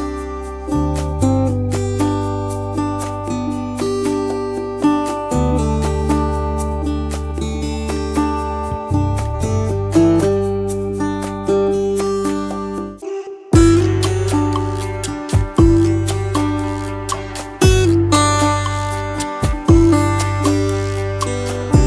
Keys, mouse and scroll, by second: 1.9 alt+scroll down 1, 2.2 space, 6.3 double click, 6.6 space, 7.0 double click, 7.1 space, 8.8 shift+click, 10.4 double click, 13.1 space, 13.5 double click, 13.6 space, 19.1 ctrl+l.